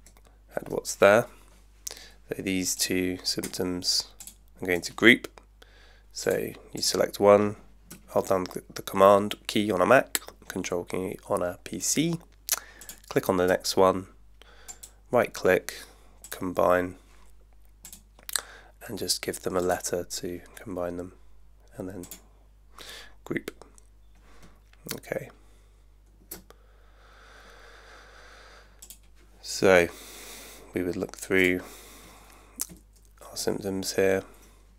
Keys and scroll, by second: 32.7 super+Right.